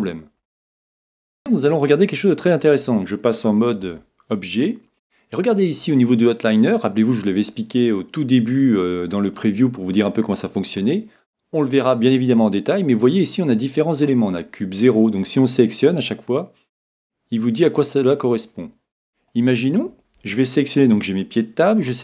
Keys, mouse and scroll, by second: 2.1-4.0 middle drag, 3.8 Tab, 8.5-10.4 drag, 17.7-19.9 drag, 19.3-21.0 middle drag, 21.2 middle click.